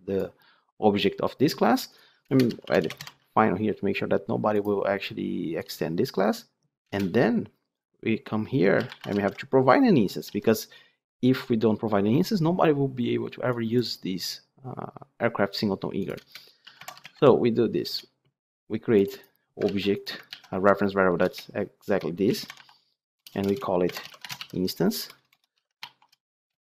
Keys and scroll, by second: 19.6 ctrl+c, 20.2 ctrl+v.